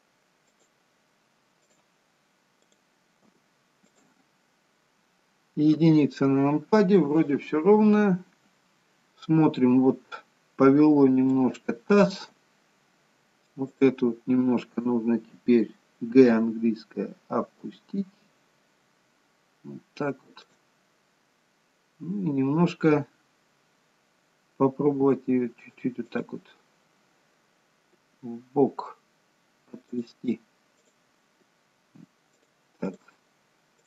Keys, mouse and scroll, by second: 0.4 click, 1.6 click, 2.5 click, 3.2 g, 6.1 KP_1, 7.4-8.7 scroll down 5, 8.7 scroll down 1, 8.9-10.9 scroll up 1, 10.9-11.3 scroll up 2, 11.4 shift+middle click, 12.3-13.5 scroll up 2, 13.5 click, 13.5-14.3 scroll up 1, 16.1 g, 30.7 click, 30.7 g, 32.7 click, 33.6 click.